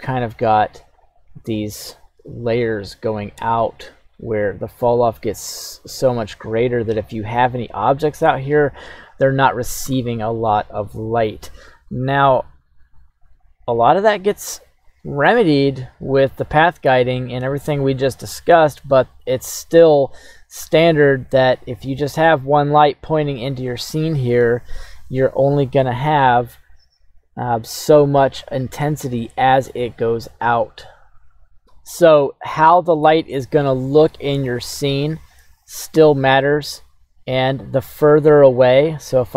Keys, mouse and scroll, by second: 1.0-2.5 drag, 3.1 click, 4.9 click, 15.8 click, 16.6-18.2 scroll down 1, 18.2 scroll down 1, 18.9 scroll down 2, 20.5-21.6 scroll down 1, 36.9-39.3 scroll down 1.